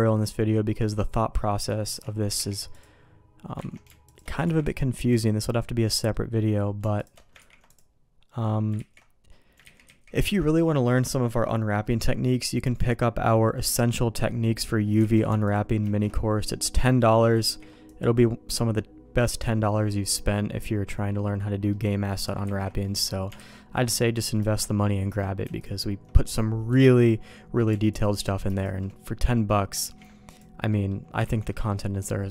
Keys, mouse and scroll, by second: 0.8 middle click, 2.4 ctrl+e, 3.6 ctrl+z, 4.1 alt+click, 4.8 ctrl+e, 5.4 middle click, 6.1 middle click, 7.4 ctrl+e, 8.8 ctrl+z, 9.6 ctrl+z, 9.9 ctrl+z, 12.2 middle click, 13.7 middle click, 18.4 ctrl+e, 18.8 middle click, 21.7 middle click, 22.4 ctrl+z, 22.8 middle click, 23.4 alt+a, 23.6 middle click, 24.4 shift+middle click, 26.7 Escape, 27.9 click, 29.1 middle click, 29.8 ctrl+e, 30.7 middle click, 31.2 ctrl+z, 31.5 middle click, 32.1 middle click.